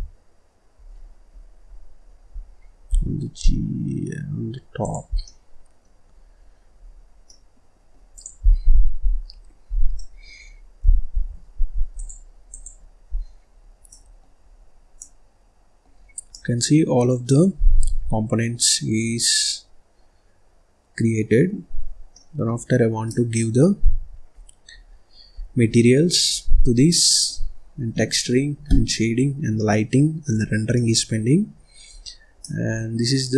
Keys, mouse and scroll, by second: 0.9-1.6 scroll down 10, 1.6-2.8 scroll up 11, 2.8 g, 5.0 scroll down 3, 5.1 middle click, 5.9-7.2 scroll up 14, 7.2 middle click, 8.0 click, 8.3-9.8 scroll down 25, 9.8 middle click, 10.3-11.1 scroll up 2, 11.1 ctrl+s, 11.8-13.1 drag, 13.1-13.4 scroll down 4, 13.4-13.8 scroll up 1, 13.8 middle click, 14.3-14.9 scroll up 1, 14.9-15.9 middle drag, 15.9-16.2 scroll down 1, 16.2 middle click, 16.5 scroll down 1, 16.8-17.2 scroll up 3, 17.2-18.9 middle drag, 18.9-19.3 scroll up 4, 19.3 scroll down 1, 19.4-21.7 middle drag, 21.7-22.0 scroll down 3, 22.0 middle click, 22.4-22.9 scroll up 2, 22.9 middle click, 23.7-24.8 scroll down 1, 24.8-25.3 scroll up 2, 25.3-25.6 scroll down 4, 25.6 middle click, 26.2-26.8 scroll up 1, 26.8-28.1 middle drag, 28.1-28.8 scroll down 3, 28.8-29.4 scroll up 1, 29.4 scroll down 1, 29.5 middle click, 30.1-30.6 scroll up 3, 30.6 middle click, 31.4-31.8 scroll down 1, 31.8-32.3 scroll up 3, 32.3-33.3 middle drag.